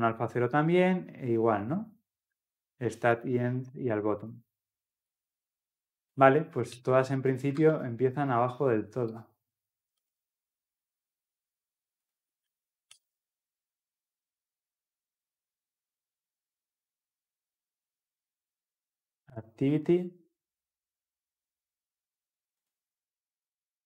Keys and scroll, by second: 10.2 ctrl+v, 13.6 ctrl+s.